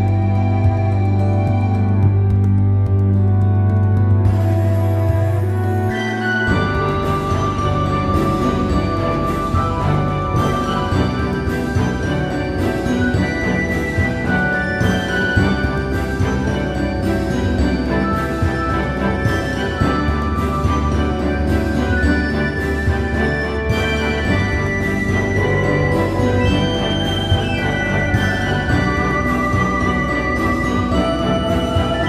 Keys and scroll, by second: 1.3 x, 2.0 space, 3.5 space, 7.7 x, 9.9 space, 12.5 x, 13.5 space, 15.4 space, 19.4 space, 22.3 space, 23.2 x, 25.9 space, 28.5 space.